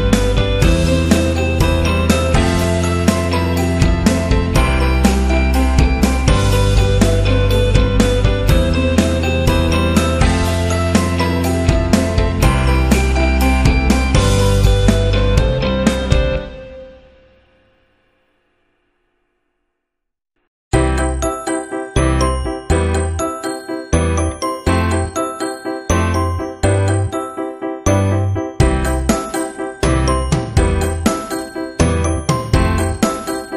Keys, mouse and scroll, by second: 0.2 click, 0.7 click, 1.6 click, 2.8 click, 7.8 click, 10.8 click, 20.3 alt+shift+click, 22.2 click, 23.4 Right, 24.4 Up, 25.6 Up, 26.4 Left, 26.9 Left, 27.8 Down, 28.1 Right, 28.7 Left, 29.1 Left, 29.9 Down, 31.2 click, 32.3 click, 33.0 click.